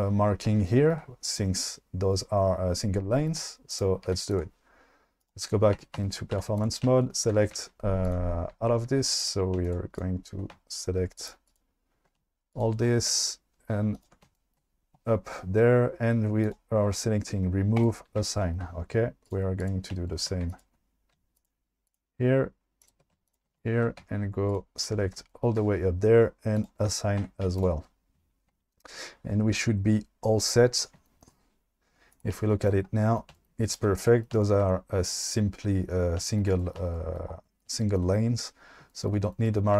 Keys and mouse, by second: 3.8 click, 4.0 q, 5.2 click, 5.8 Tab, 6.3 2, 8.1 click, 9.3 click, 11.2 shift+click, 13.9 ctrl+click, 17.8 click, 19.3 click, 20.6 ctrl+click, 22.8 shift+click, 26.7 click, 27.3 Tab, 27.4 q, 32.1 click.